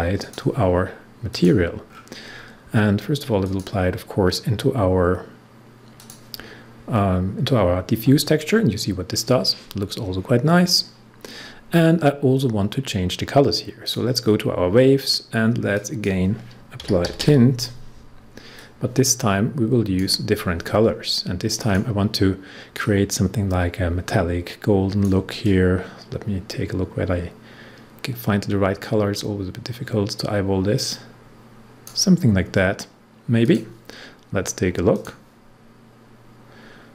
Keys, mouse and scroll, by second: 1.8 scroll down 1, 3.4 click, 5.9 click, 10.5 scroll down 1, 13.8 click, 16.5-17.9 typing, 18.5-33.4 drag, 36.5 scroll up 1.